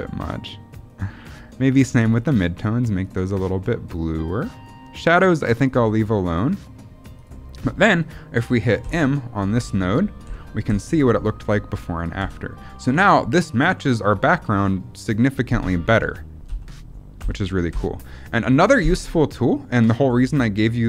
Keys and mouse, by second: 0.6 click, 1.9 click, 2.9 click, 3.8 click, 5.6 click, 7.1 click, 8.7 m, 9.5 m, 10.2 m, 10.6 m, 11.6 m, 12.1 m, 15.9 m, 16.4 m, 17.1 m, 17.7 m.